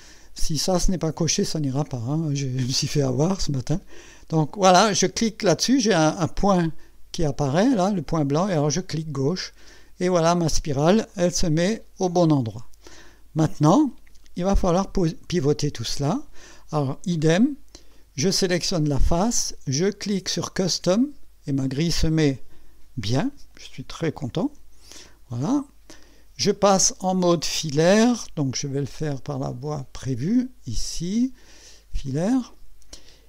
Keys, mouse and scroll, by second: 8.9 click, 11.1-13.7 drag, 17.2 right click, 17.9 click, 18.6 click, 20.8 click, 24.7 6, 25.5-25.8 scroll up 2, 26.0-27.2 right drag, 29.5 click, 32.1 click, 32.9 scroll up 1.